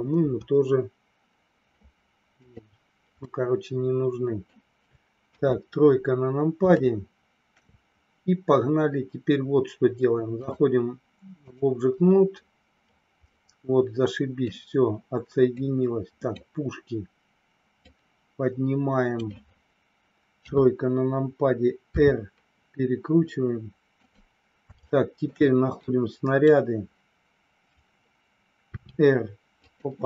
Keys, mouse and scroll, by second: 0.2 Delete, 3.3-4.5 middle drag, 5.3 KP_1, 6.8 shift+middle click, 10.5-11.5 drag, 13.3-14.5 middle drag, 15.6 click, 17.6-19.2 drag, 20.4 KP_3, 21.9 r, 24.0 click, 24.9 shift+middle click, 25.8 click, 28.6 r, 29.6 click.